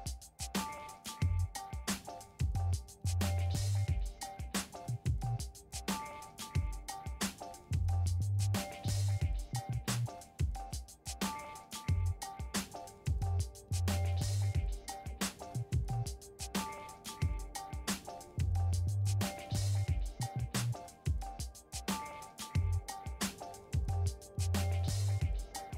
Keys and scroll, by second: 1.2 ctrl+e, 21.7 5.